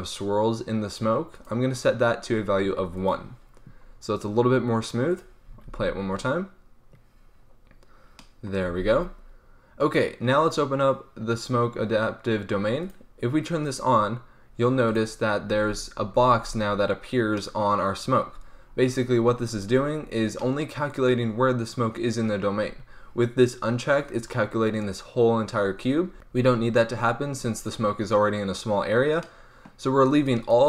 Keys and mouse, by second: 1.3-3.7 drag, 3.7-5.0 middle drag, 5.0-11.8 drag, 5.5 alt+a, 8.7 alt+a, 12.7-17.2 drag, 15.5 alt+a, 16.1 alt+a, 17.3-19.6 drag, 22.5 middle click, 27.8-29.0 middle drag, 30.1-30.6 drag.